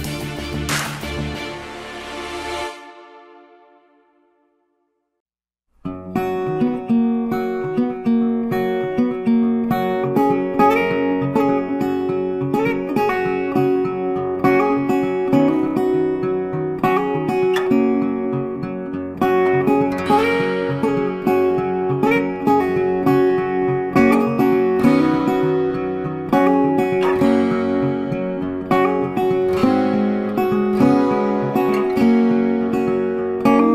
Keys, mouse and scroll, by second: 1.7 click, 5.1 click, 7.4 click, 10.9 click, 14.3 click, 19.5 z, 19.8 click, 22.6 z, 22.9 click, 27.0 click, 30.2 a, 31.0 click.